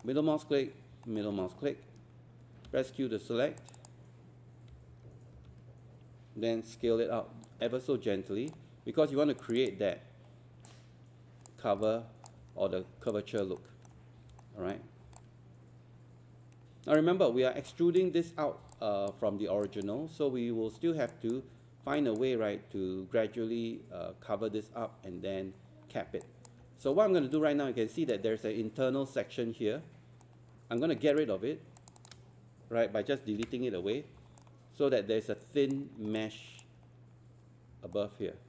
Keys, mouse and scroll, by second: 2.7 q, 3.6 click, 4.6-6.8 typing, 7.4-11.8 drag, 13.1 alt+click, 14.4 alt+middle click, 14.9 scroll up 1, 15.2-17.0 alt+drag, 17.7 alt+click, 18.5 scroll down 1, 18.7 alt+click, 19.6 alt+click, 20.0 scroll up 1, 21.1 alt+click, 22.0 alt+click, 25.0 scroll up 1, 26.2 alt+click, 26.8 scroll up 1, 26.9 alt+middle click, 27.4 alt+click, 30.2 right click, 31.1 click, 31.8 shift+click, 32.0 shift+click, 33.4 Delete, 34.4 alt+click, 36.2 alt+click, 38.0 alt+right click.